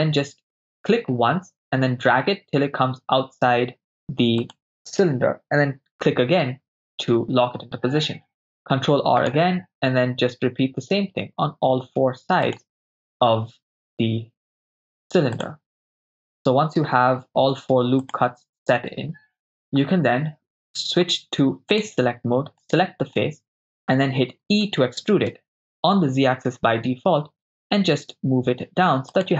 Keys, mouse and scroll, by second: 4.5 click, 8.3 ctrl+r, 12.5 click, 13.6 ctrl+r, 18.1 click, 18.9 ctrl+r, 19.6 right click, 21.7 click, 22.7 right click, 23.2 middle click, 24.7 e, 25.4 z, 25.8 z, 29.2-29.3 drag.